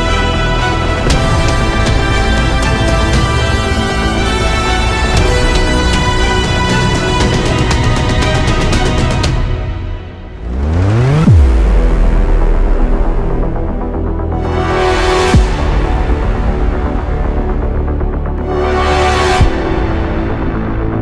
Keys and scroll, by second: 8.0 ctrl+e.